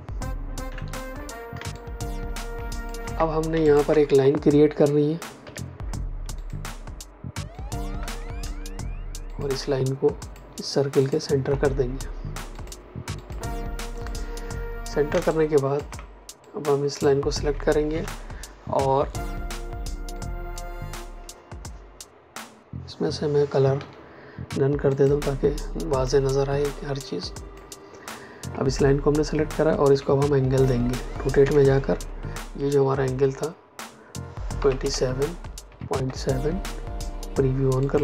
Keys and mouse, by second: 0.6 Delete, 1.5 space, 1.7 click, 2.0 space, 2.5 ctrl+space, 2.7 ctrl+alt+click, 3.6 ctrl+alt+click, 5.3 p, 6.3 click, 7.4 shift+click, 9.2 click, 10.1 shift+click, 10.9 click, 15.0 ctrl+space, 15.2 ctrl+click, 15.5 ctrl+space, 16.3 click, 20.1 click, 23.7 x, 24.8 click, 29.8 r, 31.3 KP_Enter, 34.5 KP_2, 34.7 KP_7, 35.6 KP_Decimal, 35.9 KP_7, 37.7 click.